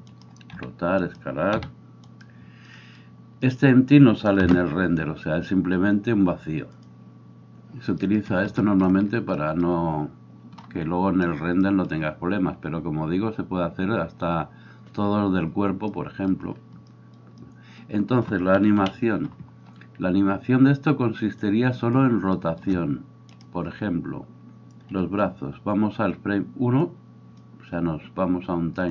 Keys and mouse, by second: 0.6 r, 1.6 s, 7.0 F12, 7.5-28.9 drag, 18.7 KP_1.